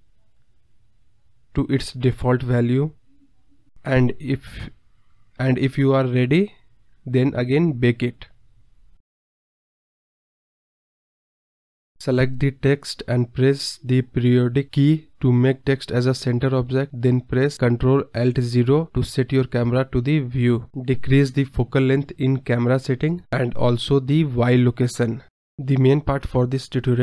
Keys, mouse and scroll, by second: 0.9 ctrl+z, 1.0-2.6 right drag, 3.0-4.1 scroll down 28, 4.1-4.9 scroll down 7, 4.9-6.5 drag, 6.5 space, 6.9 space, 7.0 scroll up 4, 7.1-10.1 drag, 10.3-10.6 drag, 10.6 space, 11.6 scroll up 3, 12.4-12.8 scroll down 5, 13.3 space, 13.7-15.0 drag, 15.6 click, 16.2 KP_Decimal, 16.8-17.4 scroll up 2, 17.6 scroll down 2, 18.7 ctrl+alt+KP_0, 19.7 click, 20.2-21.7 drag, 21.9 click, 22.7-24.5 drag, 26.2 click.